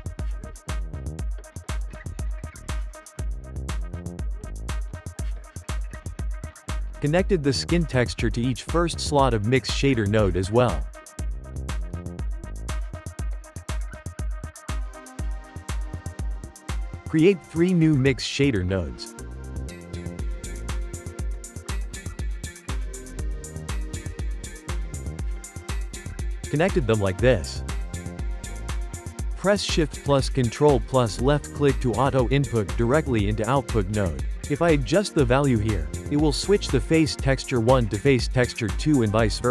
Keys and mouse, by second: 2.4-6.4 shift+middle drag, 6.4 click, 8.3-9.7 ctrl+shift+middle drag, 9.7 click, 10.7-12.0 shift+middle drag, 12.0 click, 12.5 click, 14.5-16.0 shift+middle drag, 16.0 shift+s, 16.8 shift+a, 20.6 shift+d, 22.8 shift+d, 23.9 n, 24.3-26.5 ctrl+middle drag, 26.5 click, 28.2 click, 29.3-30.5 shift+middle drag, 30.5 ctrl+shift+click, 31.7 click, 32.4 g, 33.8-34.6 shift+middle drag, 34.6 click, 38.7 shift+a.